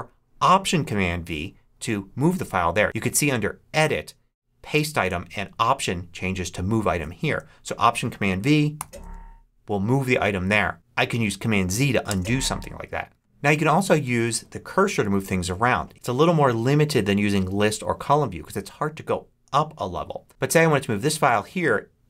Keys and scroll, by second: 8.6 alt+super+v, 12.0 super+z.